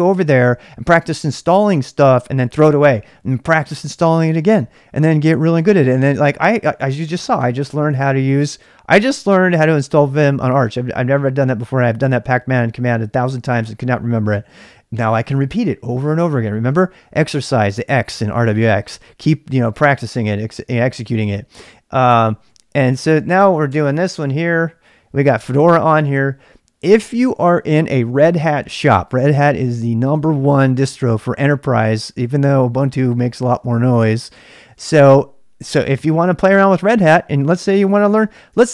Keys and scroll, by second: 23.1 y, 23.7 Return, 37.7-38.7 typing.